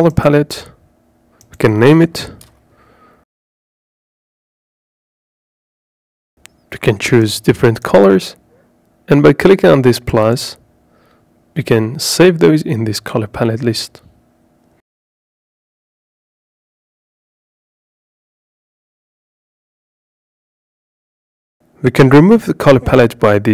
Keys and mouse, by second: 2.0-4.9 drag, 6.8 click, 9.2 click, 10.4 click, 11.9 click, 14.7 click, 15.7 click, 18.7 click, 20.0 click, 22.8 click.